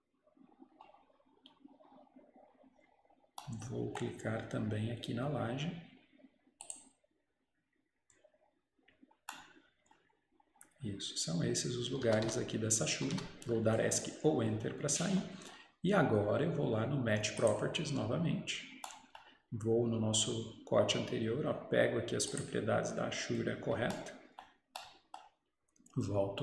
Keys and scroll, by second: 12.1 Escape, 12.3 Escape.